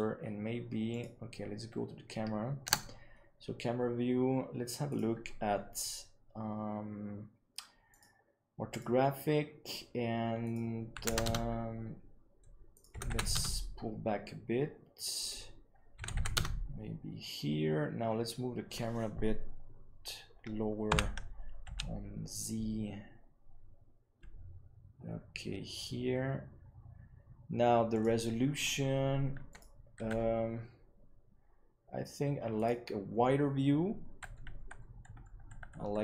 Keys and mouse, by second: 2.5 KP_0, 4.8 click, 7.9-8.7 drag, 10.3-11.5 drag, 12.6-14.7 drag, 15.1-16.5 drag, 20.8 g, 29.4 click.